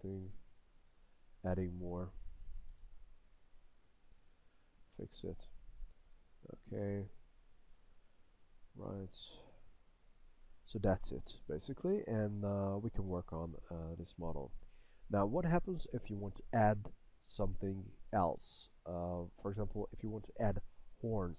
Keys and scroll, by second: 0.3 s.